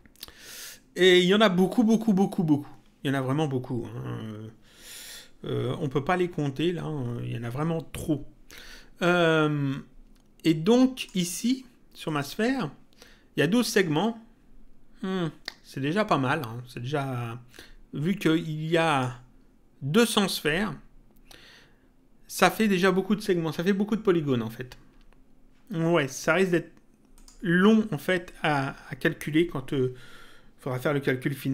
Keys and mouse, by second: 10.9 click, 18.8 click, 27.1 click.